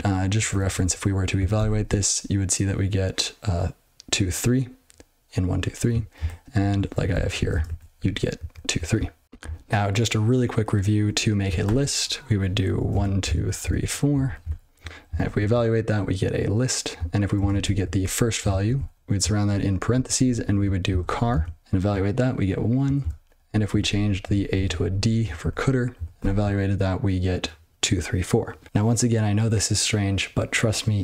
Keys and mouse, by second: 0.3 ctrl+n, 0.5 ctrl+n, 0.7 ctrl+n, 1.5 ctrl+e, 6.9 ctrl+n, 7.1 ctrl+n, 7.3 ctrl+n, 7.5 ctrl+space, 7.6 ctrl+a, 8.0 ctrl+g, 8.3 ctrl+n, 10.9-14.4 typing, 15.2 ctrl+e, 17.3 ctrl+space, 17.5 ctrl+a, 18.0 Tab, 18.4 ctrl+f, 18.7 ctrl+f, 18.9 (, 19.9 ctrl+a, 20.0 ctrl+f, 20.2 ctrl+f, 20.4 ctrl+f, 20.6-21.7 typing, 23.3 ctrl+space, 23.4 ctrl+g, 23.6 ctrl+a, 23.8 ctrl+f, 24.0 ctrl+f, 24.2 ctrl+f, 24.5 ctrl+d, 25.6 ctrl+e, 26.1 ctrl+e, 28.6 ctrl+e.